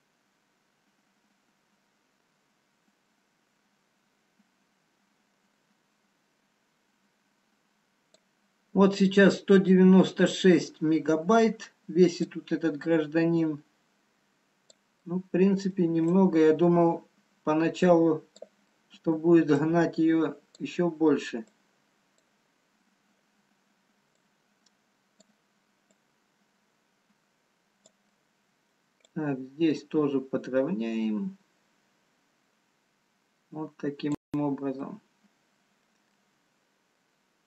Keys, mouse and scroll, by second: 12.0 scroll down 1, 12.4 click, 15.1 middle click, 16.5 click, 19.2 middle click, 19.9 click, 21.3-21.8 scroll down 4, 21.9 click, 22.7-25.0 scroll up 2, 25.0 click, 26.2 click, 28.3 middle click, 28.3 scroll up 1, 29.2 click, 35.3 middle click, 35.3-35.6 scroll down 1, 35.9 middle click.